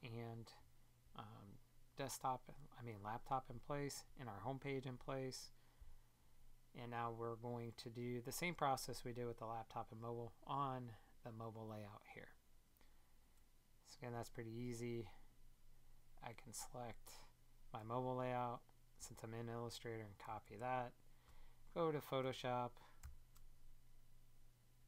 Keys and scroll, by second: 20.4 super+Tab.